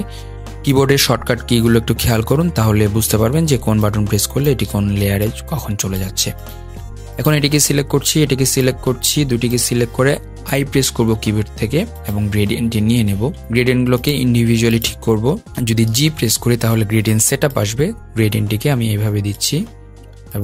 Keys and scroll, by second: 10.4 i, 15.6 g.